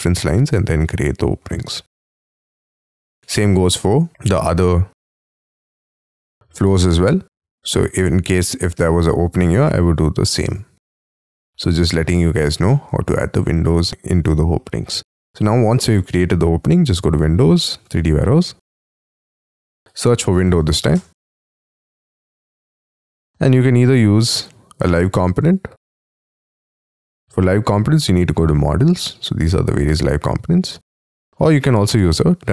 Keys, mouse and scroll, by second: 2.1-3.3 scroll down 30, 3.5 Escape, 3.5 space, 3.8 Escape, 4.1 F3, 7.3-8.0 scroll up 10, 8.0 middle click, 10.9 middle click, 11.6 scroll up 6, 11.9 scroll down 1, 12.1-12.6 scroll up 10, 12.6 shift+middle click, 13.1-17.6 scroll down 5, 19.9-21.3 typing, 23.5 scroll down 4, 24.5-24.9 scroll down 3, 29.3-29.7 scroll down 4, 29.7-32.5 scroll up 5.